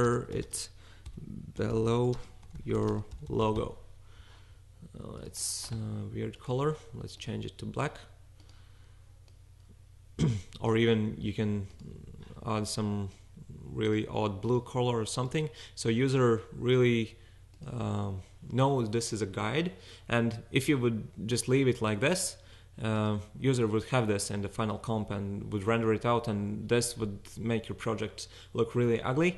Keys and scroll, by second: 0.0-4.1 typing.